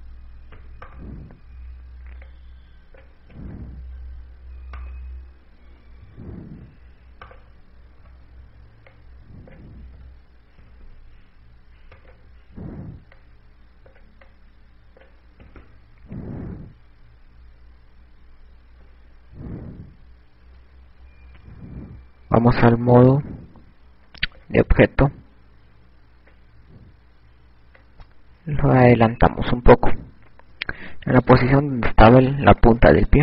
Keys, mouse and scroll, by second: 0.5 click, 1.4 i, 2.5 right click, 4.1 click, 5.7 right click, 7.1 KP_6, 9.3 right click, 9.7 KP_1, 10.7 click, 11.6 o, 12.8 i, 13.9 right click, 14.9 click, 16.0 click, 22.3 ctrl+Tab, 25.9 click.